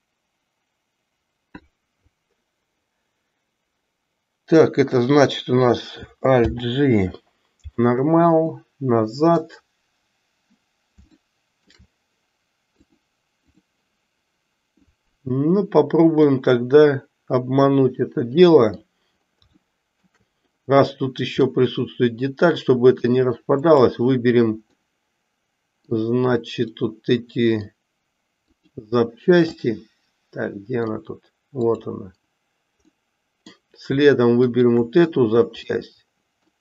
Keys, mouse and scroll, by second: 6.3 alt+g, 8.6 middle click, 11.2 shift+middle click, 12.9 click, 16.2-18.9 middle drag, 19.7-20.2 shift+middle drag, 21.5-23.0 middle drag, 23.7 click, 24.7-26.0 middle drag, 26.7 middle click, 29.6-31.0 middle drag, 32.9-33.6 middle drag, 34.3 shift+click, 35.6-36.6 middle drag.